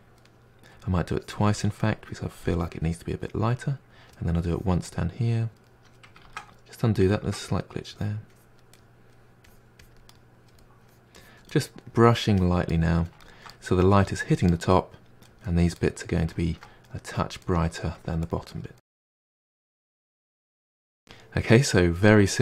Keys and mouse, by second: 1.1-1.6 drag, 1.6-2.5 middle drag, 2.5-2.9 drag, 2.9-4.5 middle drag, 4.5-4.9 drag, 4.9-6.3 middle drag, 6.3 ctrl+z, 6.5-7.9 middle drag, 7.9-8.7 drag, 8.7-9.5 middle drag, 9.5-10.1 drag, 10.1-10.8 middle drag, 10.8-11.5 drag, 11.5-12.1 middle drag, 12.1-12.7 drag, 12.7-15.4 middle drag, 15.4 click, 15.8-17.1 middle drag, 17.1 click, 17.4-17.9 middle drag, 17.9 drag, 18.2-18.8 middle drag, 18.8 drag, 18.9 middle drag, 19.2 click, 19.3 middle drag, 19.6-19.9 drag, 19.9-20.4 middle drag, 20.4 drag, 20.6-22.4 ctrl+middle drag.